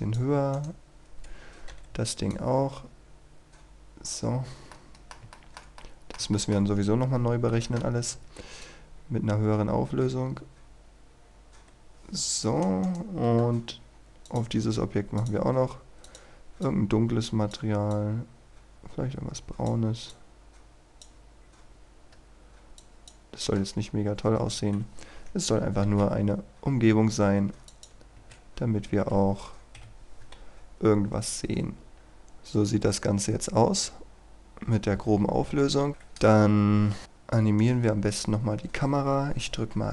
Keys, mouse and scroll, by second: 0.5 right click, 1.7 z, 2.3-4.2 drag, 4.3-4.7 scroll down 1, 4.7 middle click, 5.8 middle click, 6.3 shift+middle click, 7.5 z, 8.6-12.9 drag, 12.9 right click, 14.3 click, 14.5-15.2 scroll up 1, 15.2-21.2 drag, 22.1-22.8 scroll down 1, 22.8 click, 24.0-24.4 scroll down 1, 24.4 KP_0, 25.9 shift+f, 26.0-26.9 scroll down 1, 27.7 click, 28.5-28.8 scroll up 1, 29.8 F12, 35.9 Escape, 36.2 KP_3, 36.7-37.0 scroll down 1, 37.0-37.7 scroll up 1, 37.7 right click, 37.9-39.1 scroll up 1.